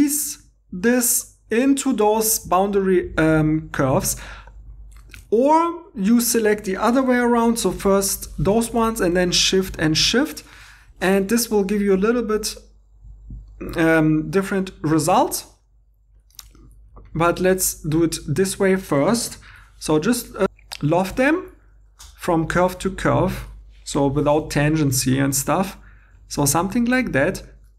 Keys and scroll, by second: 4.6 Escape, 5.2 2, 8.2 |, 17.6 2, 19.5 |, 22.3 2, 24.1 |.